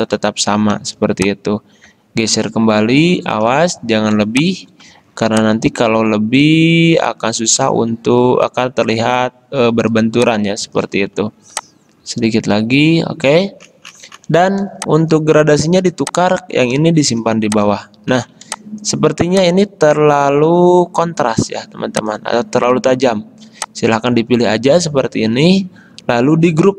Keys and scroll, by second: 0.9 v, 4.3 space, 14.8 space, 17.3 v, 18.6 space, 24.4 ctrl+z.